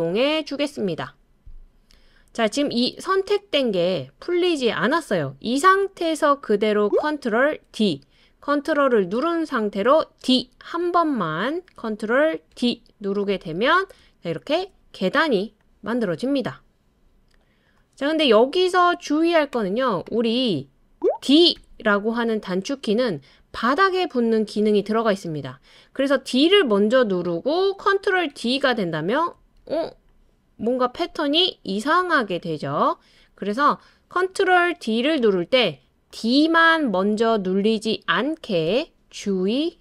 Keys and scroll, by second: 7.7 super+d, 10.2 super+d, 12.5 super+d, 14.6 super+d, 21.6 d, 28.3 super+d, 29.6 super+d, 32.0 super+d, 38.7 BackSpace.